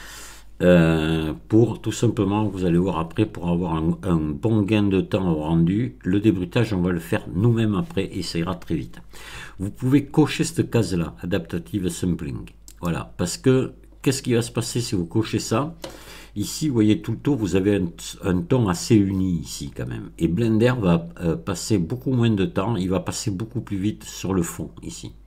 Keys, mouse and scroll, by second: 5.1-5.5 scroll up 2, 12.7 click.